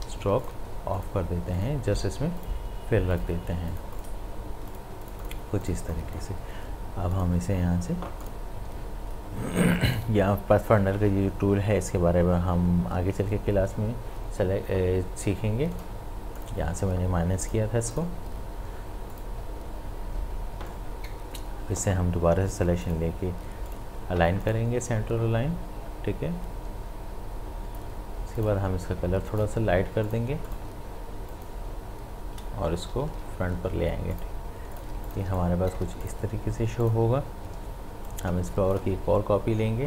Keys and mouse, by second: 0.1 ctrl+z, 0.4 click, 15.7-22.8 drag, 26.5 click, 28.3 click, 33.0 ctrl+shift+], 34.2 click, 34.9 space, 35.1 ctrl+click, 35.4 click, 35.8 space, 38.1-39.8 alt+drag.